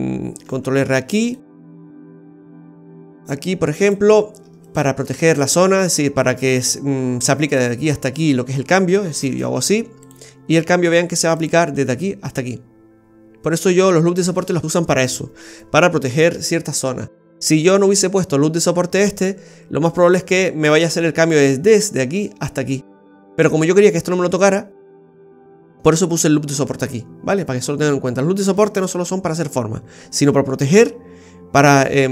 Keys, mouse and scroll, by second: 0.4 ctrl+r, 4.6 right click, 5.1 alt+shift+right click, 5.3 right click, 9.3-10.5 typing.